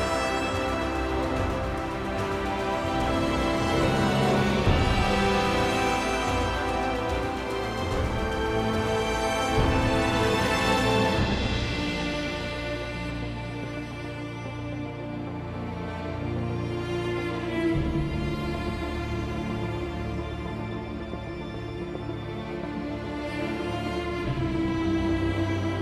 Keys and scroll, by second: 3.6-6.7 typing, 9.0-11.2 typing.